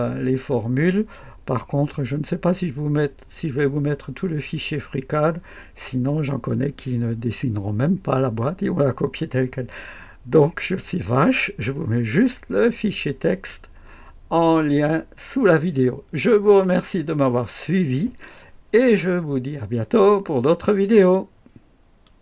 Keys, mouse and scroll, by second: 20.9 right click, 22.0 click.